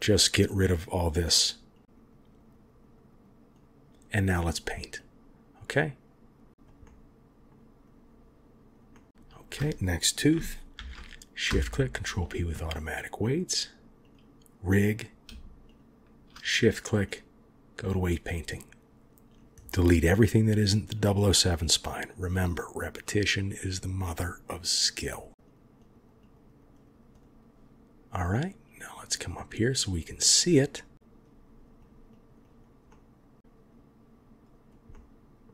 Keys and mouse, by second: 0.4-1.4 drag, 1.7 click, 1.8 click, 2.0 click, 2.2 click, 2.3 click, 2.4 click, 2.6 click, 2.7 click, 2.9 click, 3.0 click, 3.2 click, 3.5 click, 4.9 click, 5.6 click, 6.5 click, 6.8 middle click, 7.8 click, 8.9 middle click, 9.2 shift+click, 10.7 ctrl+p, 12.5 click, 13.1 click, 17.0-17.9 drag, 21.6 click, 21.8 click, 21.9 click, 22.3 click, 22.5 click, 22.7 click, 22.9 click, 23.2 click, 23.3 click, 23.6 click, 23.9 click, 24.1 click, 24.3 click, 25.3 click, 25.5 click, 25.7 click, 25.9 click, 26.0 click, 26.1 click, 26.3 click, 26.4 click, 26.5 click, 26.7 click, 27.1 click, 28.6 click, 29.3 middle click, 30.9 click, 31.7 click, 32.0 click, 32.3 click, 32.8 middle click, 33.4-34.6 drag, 34.9 middle click.